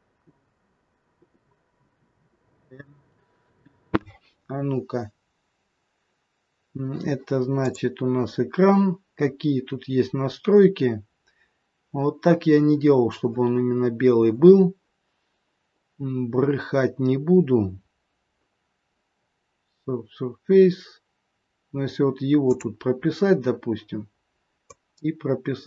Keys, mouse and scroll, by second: 1.3 click, 2.4 click, 7.5 click, 9.0-10.5 scroll down 2, 10.5-12.2 scroll down 2, 16.7-17.6 scroll down 1, 17.6-20.3 scroll down 3, 20.3-20.7 scroll down 2, 22.4 click, 24.7 click.